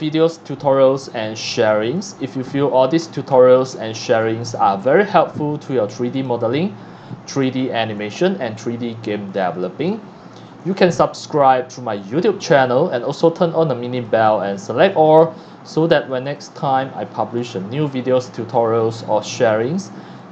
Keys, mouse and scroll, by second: 0.0 click, 0.7 scroll up 1, 1.0 scroll down 1, 1.9 click, 2.5 scroll up 1, 3.0-3.5 scroll up 2, 3.7-4.3 scroll down 3, 4.5 x, 4.6-6.1 drag, 4.8 c, 6.3-8.5 typing, 6.4 click, 7.6 click, 9.5 x, 9.6 click, 9.9 c, 10.7 x, 11.1 c, 12.2 x, 12.3 click, 14.0 click, 14.9 scroll up 1, 15.2 scroll down 1, 16.2 click, 17.0 scroll up 1, 17.4 scroll down 1, 18.1 scroll down 1, 19.3 click, 20.2 click.